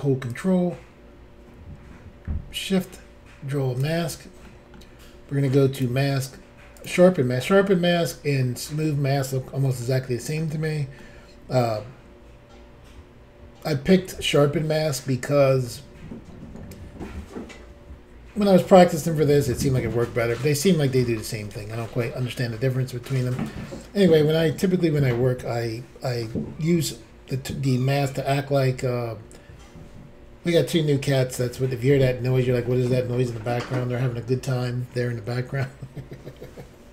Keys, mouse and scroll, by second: 4.4 middle click, 5.7 click, 5.8 click, 6.7 click, 6.8 click, 8.4 middle click, 9.8 shift+middle click, 11.0 middle click, 14.6 scroll up 1, 16.9-17.6 scroll down 1, 21.8 middle click, 22.5-23.0 scroll down 1, 23.2-23.6 scroll up 1.